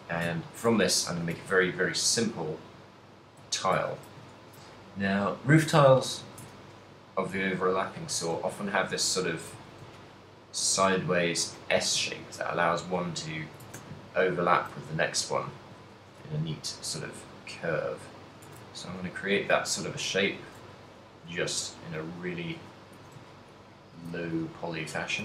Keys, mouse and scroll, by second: 0.1 shift+middle click, 0.6 ctrl+middle click, 0.8 Tab, 1.2 s, 3.4 click, 3.6 ctrl+middle click, 3.9 a, 4.4 ctrl+r, 5.9 click, 6.0 shift+middle click, 6.4 a, 6.6 ctrl+r, 8.1 click, 8.5 a, 8.7 ctrl+click, 9.6 z, 10.0 ctrl+click, 11.0 r, 11.8 click, 11.8 a, 12.3 ctrl+click, 13.0 click, 13.7 a, 13.9 ctrl+click, 14.8 e, 15.8 ctrl+z, 15.8 ctrl+right click, 16.2 r, 16.9 g, 18.4 click, 18.4 a, 18.9 ctrl+click, 19.6-23.0 typing, 20.5 click, 20.8 ctrl+click, 22.5 click, 23.4 ctrl+click, 24.2 g.